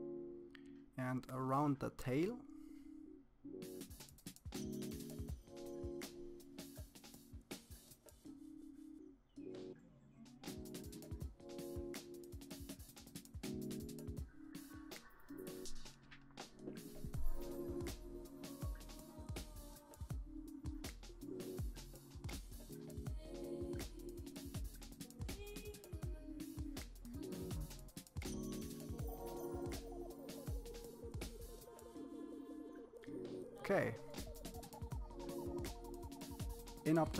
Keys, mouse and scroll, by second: 0.2 click, 1.3 middle click, 1.7 click, 2.4 middle click, 4.6 click, 5.0 middle click, 5.7 click, 6.4 f, 6.8 click, 8.7 click, 9.1 click, 9.4 f, 10.0 click, 11.0 click, 11.9 click, 12.5 middle click, 12.8-13.2 scroll down 3, 13.2 click, 13.5 KP_1, 13.5 shift+middle click, 13.6 scroll up 3, 14.0 click, 14.7 click, 15.3 middle click, 15.5 scroll down 3, 15.6 middle click, 15.7 scroll up 3, 15.8 scroll down 1, 16.0 click, 16.7 click, 17.3 click, 18.2 click, 19.0 click, 19.4 click, 20.2 click, 20.9 middle click, 21.1 scroll up 2, 21.2 scroll down 1, 21.6 click, 22.3 click, 22.9 click, 23.2 middle click, 23.7-24.0 scroll down 2, 24.0 click, 25.7 click, 26.5 middle click, 26.6 scroll up 1, 26.7 f, 27.1 click, 28.5 scroll down 2, 28.6 middle click, 28.9 scroll up 3, 29.0 middle click, 29.2 f, 29.6 click, 31.1-32.5 drag.